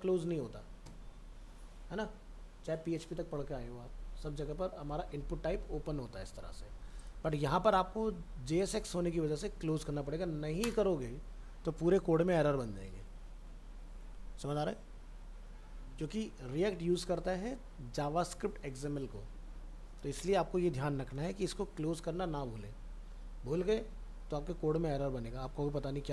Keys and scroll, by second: 21.1 ctrl+z.